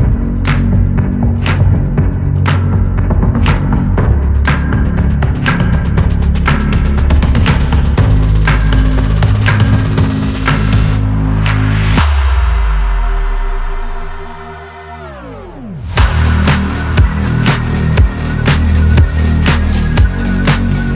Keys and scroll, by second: 18.2 ctrl+d.